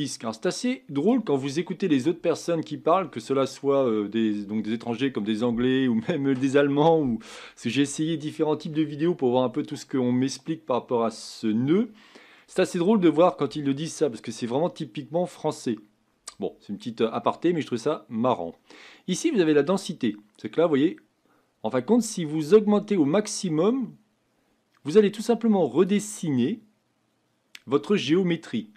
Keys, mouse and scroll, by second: 19.8-22.4 drag, 26.4-28.7 middle drag.